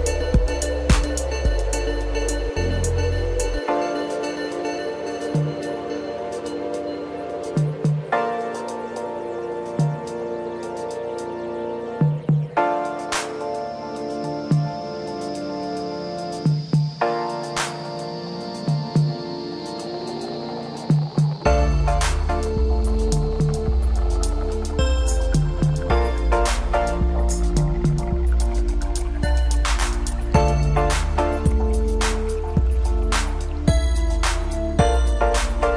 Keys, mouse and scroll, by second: 1.2 scroll up 1, 1.4 Tab, 1.9 click, 2.3 click, 2.4 scroll up 2, 2.5 scroll down 1, 2.6 middle click, 3.3 scroll down 2, 3.4 middle click, 4.2 click, 4.6 scroll up 2, 4.9 Tab, 5.0 click, 5.8 click, 6.1 click, 6.4 click, 7.2 Tab, 7.4 click, 8.0 shift+click, 8.4 ctrl+KP_Add, 8.5 ctrl+KP_Add, 9.1 click, 9.3 scroll down 2, 9.5 click, 9.7 scroll up 1, 9.8 scroll down 2, 9.8 middle click, 10.4 scroll up 1, 10.6 Tab, 10.9 click, 11.1 click, 11.3 scroll up 1, 11.5 scroll down 3, 11.6 middle click, 11.9 scroll up 1, 12.1 click, 12.5 click, 14.8 scroll up 2, 14.9 scroll down 1, 15.2 click, 15.6 drag, 15.9 drag, 16.6 scroll up 1, 16.9 Tab, 17.3 click, 17.9 click, 18.1 click, 18.5 click, 19.2 drag, 19.5 click, 19.6 scroll up 1, 19.7 scroll down 1, 20.0 click, 20.1 scroll up 2, 20.2 scroll down 2, 20.3 middle click, 20.8 click, 20.9 scroll up 1, 21.1 middle click, 21.4 Tab, 21.6-22.1 scroll up 3, 21.7 middle click, 22.1 click, 22.3 scroll down 2, 22.4-23.2 middle drag, 23.2 click, 23.9 click, 24.3 click, 24.6 click, 25.5 Tab, 25.8 middle click, 26.2 scroll up 1, 26.9 click, 27.5-28.5 drag, 28.7 click, 29.3 click, 30.6 click, 31.4 click, 32.4-33.4 drag, 33.8 click, 34.2 click, 34.4 scroll down 3, 34.5 middle click, 35.1 click, 35.4 Tab, 35.6 click.